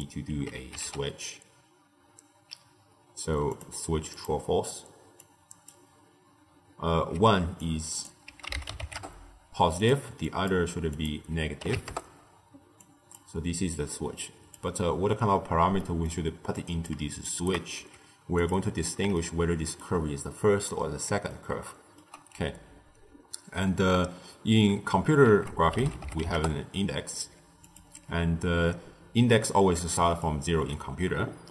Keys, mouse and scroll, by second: 5.1 click, 7.5 drag, 10.2 click, 10.8-12.8 drag, 13.6 drag, 15.7-16.5 middle drag, 16.5 click, 17.2 shift+right click, 17.7 g, 19.0-24.2 shift+middle drag, 25.2 ctrl+a, 28.6-31.5 typing, 29.7-30.2 drag.